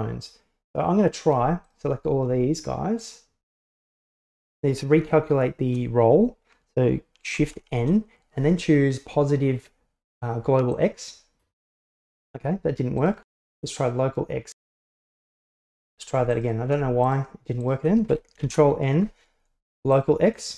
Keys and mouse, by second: 1.7 shift+right click, 3.1-3.8 shift+right drag, 7.4 shift+n, 12.8 right click, 13.3 shift+n, 15.8 ctrl+z, 16.4 shift+right click, 17.1 right click, 17.7 right click, 18.5 shift+n.